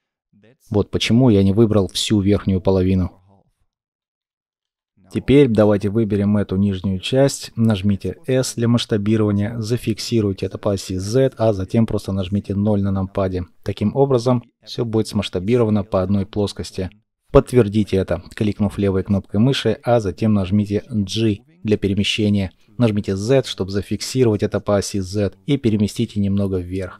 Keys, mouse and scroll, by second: 0.7 ctrl+z, 4.5 ctrl+shift+z, 7.1-7.7 scroll up 1, 7.7 s, 9.9 z, 12.2 KP_0, 20.7 g, 22.1 z, 26.8 middle click.